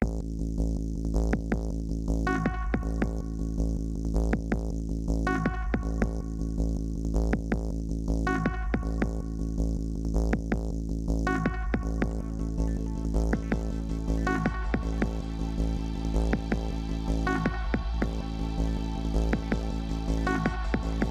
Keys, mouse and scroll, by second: 8.9 right click.